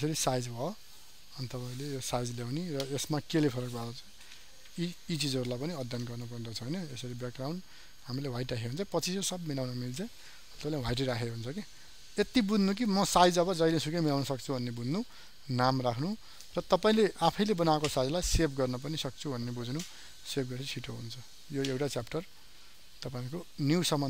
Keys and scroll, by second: 3.6 ctrl+n.